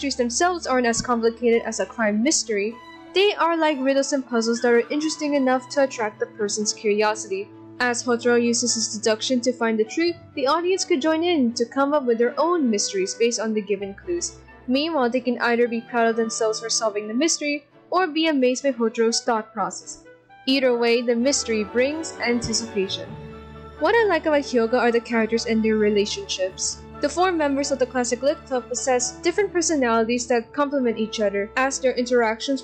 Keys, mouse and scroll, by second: 14.9 ctrl+], 15.5 ctrl+], 16.1 shift+c, 17.6 ctrl+z, 18.6 ctrl+=, 19.5 ctrl+=, 20.6 ctrl+z, 21.1 ctrl+=, 23.3 ctrl+z, 24.0 ctrl+z, 28.6 ctrl+z, 28.9 ctrl+z, 30.7 ctrl+z, 31.6 ctrl+z, 31.9 ctrl+z.